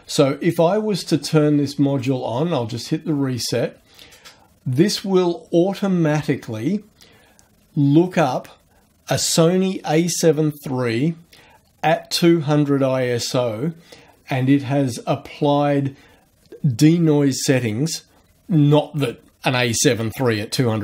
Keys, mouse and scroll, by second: 2.0 click.